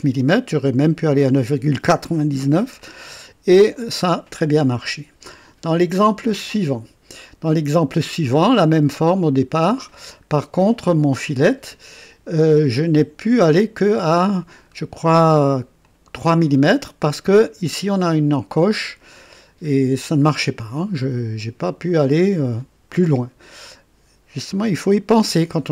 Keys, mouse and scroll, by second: 2.8-4.3 drag, 5.9 click, 7.4-9.1 drag, 9.1 right click, 10.1 scroll up 1, 13.3-14.1 drag, 14.7 scroll up 2, 15.8-16.6 drag, 23.1-23.5 scroll down 2.